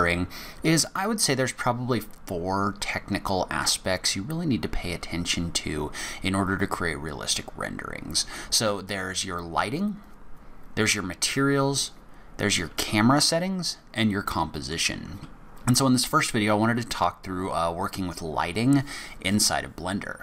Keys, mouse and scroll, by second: 0.1 shift+middle click, 14.0 middle click.